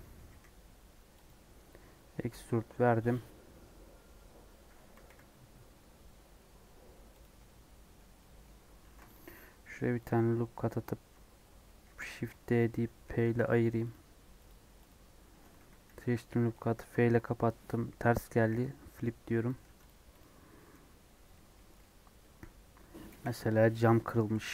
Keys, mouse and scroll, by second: 0.2 e, 1.7 scroll up 2, 1.9-4.9 middle drag, 4.9 g, 7.3-8.8 middle drag, 8.8 ctrl+r, 11.8 shift+d, 13.4 p, 13.8 click, 14.4 click, 14.8 click, 15.2 Tab, 15.5 a, 15.8 f, 16.4-18.4 middle drag, 19.4 alt+n, 19.6 Tab, 19.8 click, 20.1 click, 20.5 middle click, 20.7 g, 21.5 middle click, 22.0 scroll up 1, 22.1 middle click, 23.0 KP_1, 23.6 Tab.